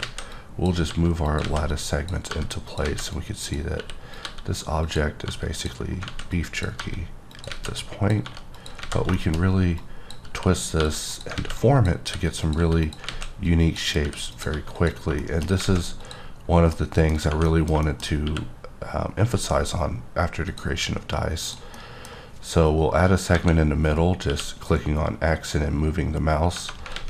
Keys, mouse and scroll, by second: 0.0 alt+a, 0.3 click, 0.9 g, 1.3 click, 1.4 alt+a, 2.0 click, 2.3 g, 2.7 click, 2.8 alt+a, 3.1 click, 3.7 r, 4.1 click, 4.2 g, 4.8 click, 5.2 g, 5.5 click, 5.9 scroll down 1, 6.0 alt+a, 6.3 click, 6.8 g, 7.3 click, 7.5 alt+a, 7.8 click, 8.2 g, 8.6 click, 8.9 alt+a, 9.1 middle click, 9.8 click, 10.7 click, 10.8 g, 11.1 click, 11.3 alt+a, 11.6 click, 12.1 r, 12.4 click, 12.5 g, 12.8 click, 13.1 alt+a, 13.4 click, 14.0 r, 14.3 click, 14.5 g, 14.7 click, 15.2 shift+middle click, 15.6 alt+a, 16.0 click, 16.7 middle click, 17.4 middle click, 18.2 q, 20.5 click, 21.4 click, 21.7 middle click, 23.3 KP_7, 24.2 q, 26.9 alt+a.